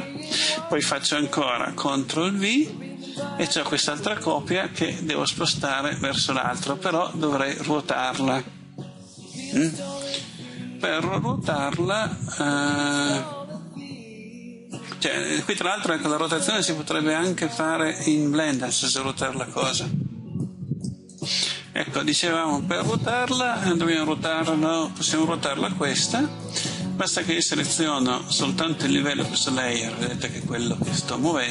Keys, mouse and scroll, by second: 2.6 ctrl+v, 4.4-31.5 drag.